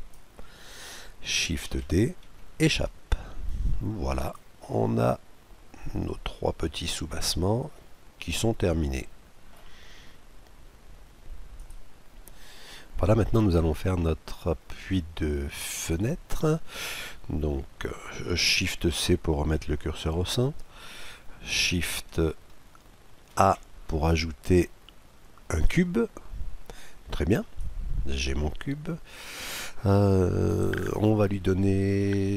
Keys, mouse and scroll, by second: 1.6 shift+d, 3.1-4.7 drag, 4.7-6.5 middle drag, 7.2-7.7 scroll up 1, 7.7-9.5 middle drag, 13.4-15.1 middle drag, 15.2 middle click, 15.8-17.8 scroll down 1, 17.8 scroll up 1, 18.4 shift+c, 23.0 shift+a, 27.2-29.0 drag.